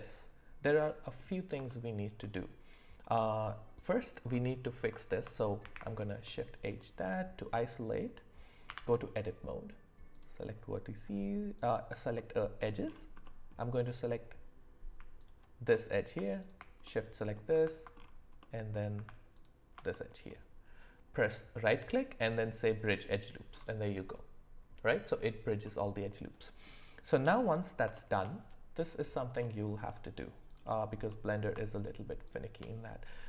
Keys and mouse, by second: 0.8 middle click, 1.7-2.2 shift+middle drag, 3.7 click, 5.6 shift+h, 6.2-6.8 middle drag, 8.7 Tab, 10.1 click, 12.1 middle click, 13.2 middle click, 15.2 ctrl+shift+click, 16.4 shift+click, 16.8 middle click, 18.4 middle click, 19.9 middle click, 21.2-23.0 drag, 25.6-26.6 middle drag, 27.4 middle click, 27.9 shift+middle click, 29.4 middle click, 30.5 click, 31.1 middle click.